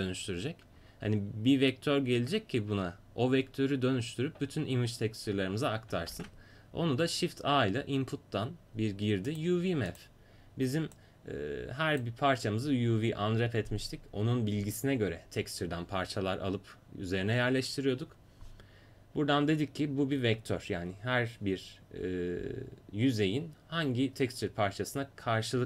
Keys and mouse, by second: 6.1 shift+a, 11.0-13.8 drag.